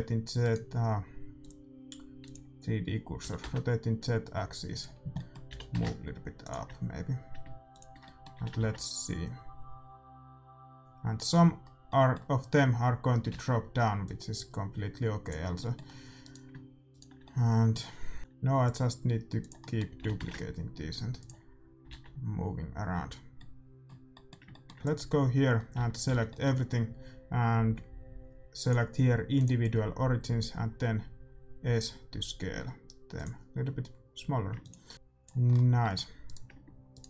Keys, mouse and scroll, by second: 1.3-3.2 drag, 3.1 r, 5.1-7.7 middle drag, 5.4 g, 7.7-9.6 drag, 8.0-9.8 middle drag, 8.3 a, 11.6-12.6 middle drag, 13.3 alt+a, 14.0-15.5 drag, 15.5 middle click, 16.2-18.2 right drag, 18.2 alt+d, 18.2 r, 19.6-21.5 middle drag, 19.9 g, 21.9 alt+a, 23.4-24.6 middle drag, 24.7 ctrl+s, 24.7-26.4 drag, 25.4-27.9 middle drag, 25.7 a, 26.0 a, 28.6-30.4 drag, 30.5 s, 34.6-36.6 drag, 34.9 alt+a, 34.9 middle click, 36.0 a, 36.6-37.0 right drag.